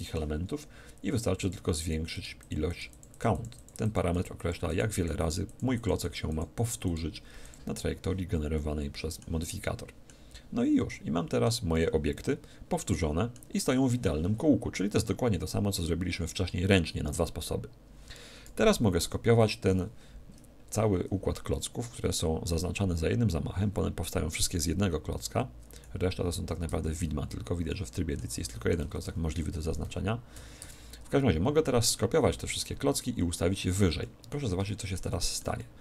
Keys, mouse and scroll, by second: 1.4-9.2 drag, 8.6-13.4 middle drag, 18.6 KP_1, 19.0 KP_7, 22.4-24.2 right drag, 25.9 z, 26.4 z, 26.7 Tab, 27.7-30.2 middle drag, 28.8 a, 29.0 a, 29.8 a, 30.6 Tab, 30.6 a, 33.4-35.8 middle drag.